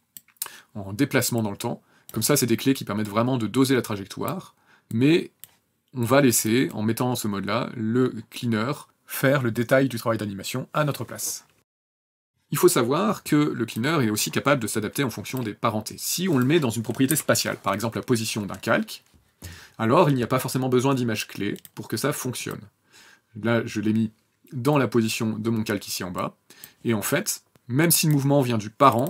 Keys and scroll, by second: 8.8 KP_0, 12.2 KP_0, 16.9 p.